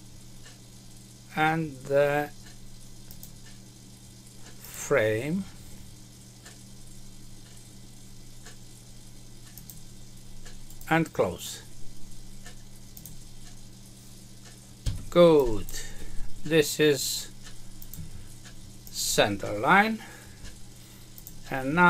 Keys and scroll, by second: 14.8 Escape.